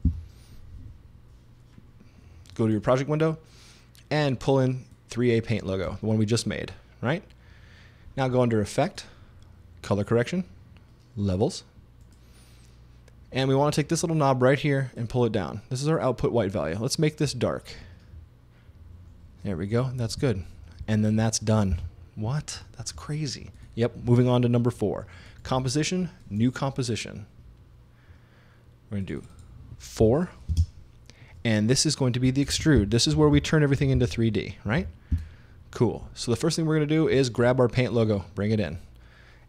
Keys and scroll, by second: 0.1 Return, 21.7 super+s, 30.0 4, 30.5 space, 32.3-34.8 typing, 35.1 Return.